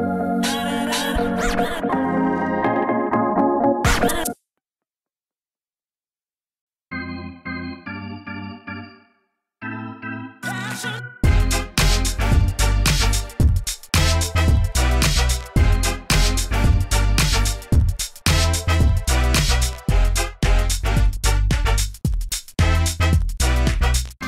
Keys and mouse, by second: 0.2 Tab, 0.4 ctrl+e, 0.7 Tab, 2.1 Tab, 3.4 shift+right click, 4.0 ctrl+e, 4.6 Tab, 5.2 Tab, 5.8 ctrl+e, 7.6 ctrl+e, 7.9 Tab, 9.5 Tab, 10.4 q, 10.7 g, 11.1 click, 11.6 Tab, 12.7 middle click, 13.6 ctrl+s, 15.3 Tab, 17.3 x, 18.3 g, 19.6 f, 19.8 a, 20.3 ctrl+e, 21.0 a, 21.6 ctrl+e, 22.5 a.